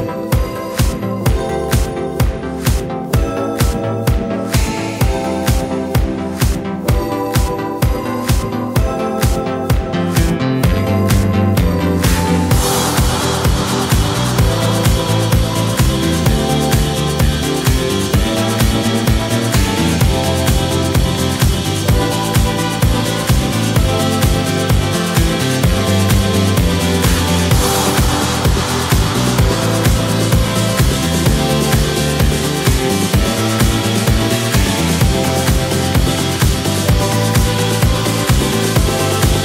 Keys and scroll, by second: 2.4 super+c, 2.5 super+v, 11.2 7, 11.4 Return, 16.6 super+c, 16.6 super+v, 22.9 d, 27.8 l, 30.9 typing, 35.7 typing, 35.8 Return, 37.2 l, 38.8 typing.